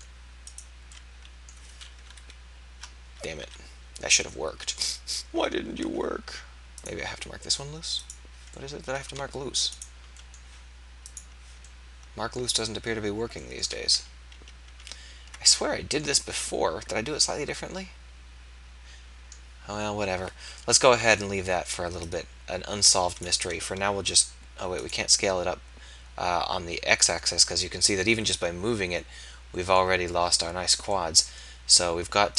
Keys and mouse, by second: 1.1-2.1 drag, 2.1 KP_1, 3.6 KP_3, 6.6 e, 8.5 click, 9.7 middle click, 13.7 ctrl+z, 13.9 ctrl+z, 14.3 ctrl+z, 14.7 ctrl+z, 20.6 KP_3, 24.0 s.